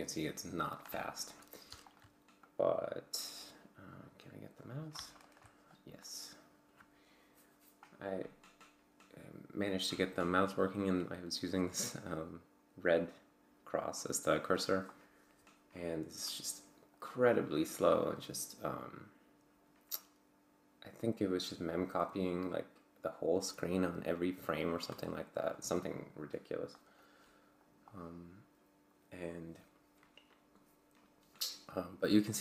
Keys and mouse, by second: 0.7 click, 1.9 ctrl+click, 2.4 click, 5.2 ctrl+click, 7.8-9.8 drag, 14.9 click, 24.8-26.8 drag, 27.9-32.1 drag.